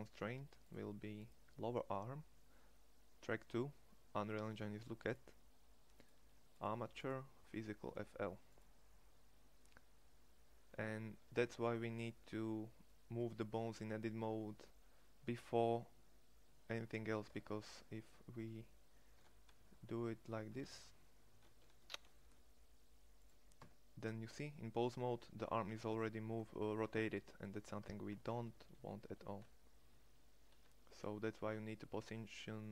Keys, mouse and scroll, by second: 13.0-16.9 middle drag, 16.9 Tab, 18.7 r, 23.2 Tab, 27.4 Tab, 27.9 ctrl+z, 28.3 ctrl+z.